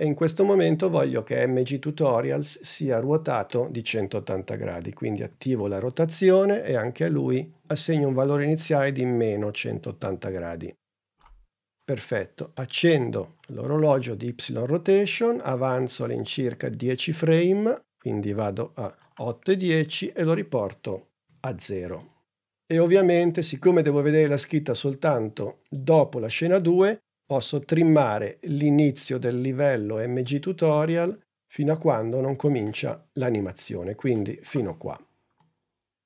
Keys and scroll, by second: 5.2 r, 21.1 0.